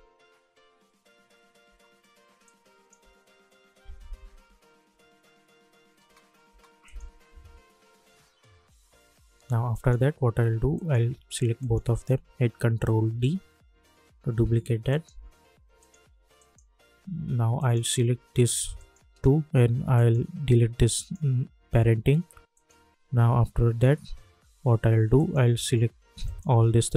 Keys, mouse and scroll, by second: 2.4 click, 3.0 space, 6.8 click, 7.6 Up, 9.9 click, 11.6 shift+click, 13.0 ctrl+d, 14.9 click, 18.7 shift+click, 23.5 -, 25.1-26.9 drag.